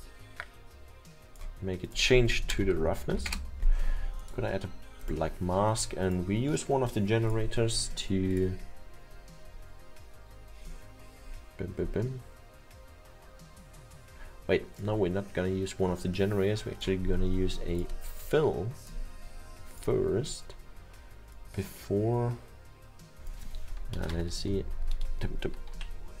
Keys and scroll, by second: 2.3-3.2 typing, 3.3 Return, 24.0 BackSpace, 24.4 BackSpace, 24.7 BackSpace, 24.9 BackSpace.